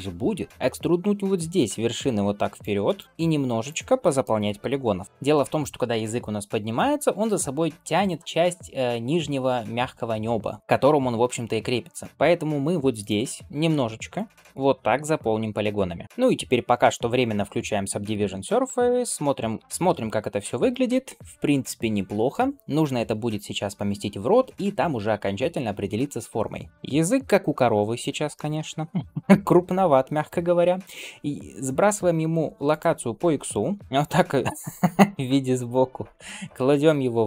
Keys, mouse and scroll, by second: 2.8 click, 3.0 middle click, 3.0 f, 3.9 middle click, 4.4 g, 5.0 middle click, 10.6 shift+middle click, 12.1 click, 12.1 f, 13.4 click, 14.4 click, 14.8 f, 15.8 middle click, 15.8-16.4 scroll up 2, 16.0 click, 17.9 click, 19.6 ctrl+space, 19.8 ctrl+space, 20.3 scroll down 1, 20.5-20.9 drag, 20.9-22.2 middle drag, 22.6 ctrl+s, 26.7 shift+middle click, 26.7 click, 26.7 KP_1, 27.3 g, 28.2 shift+middle drag, 28.6 scroll up 1, 29.8-30.3 scroll up 1, 29.8 n, 32.5-33.8 drag, 33.8 middle click, 33.8 KP_3, 34.8 g, 35.9 shift+middle drag, 36.3 scroll up 1, 36.8 s.